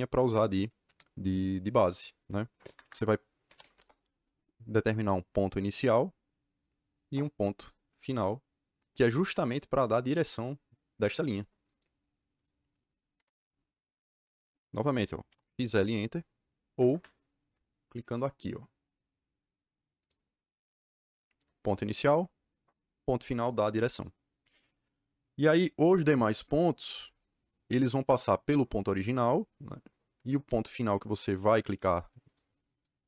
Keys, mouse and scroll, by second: 2.6 Escape, 2.8 Escape, 3.2-4.1 typing, 5.4 click, 7.5 click, 11.6 click, 12.3 click, 13.1 KP_Enter, 15.0-15.8 typing, 16.7 Escape, 16.8 Escape, 19.9 click, 21.7 click, 23.8 click, 31.6 click, 32.2 click, 32.7 click.